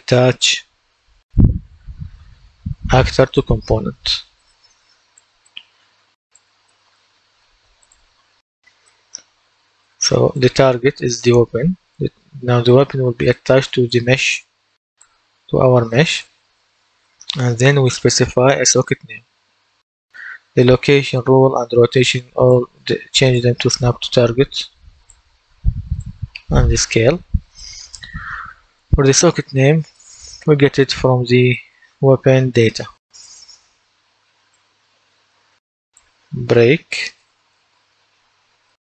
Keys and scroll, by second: 1.5-2.7 typing, 31.8-34.3 typing, 37.5-38.7 typing.